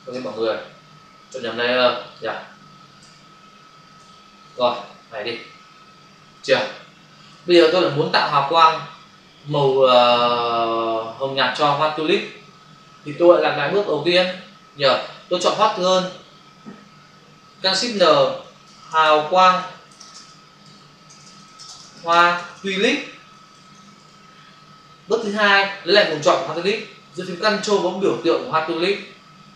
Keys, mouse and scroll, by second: 0.2 ctrl+alt+z, 2.0 click, 3.0 alt+BackSpace, 4.6 ctrl+d, 15.5 click, 17.9 ctrl+shift+n, 18.4-22.2 typing, 23.4 typing, 24.0 Return, 28.8 ctrl+click.